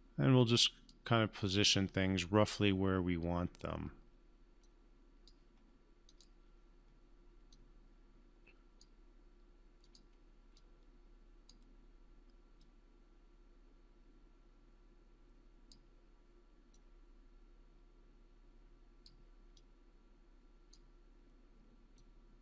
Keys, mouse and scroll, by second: 4.9-5.5 drag.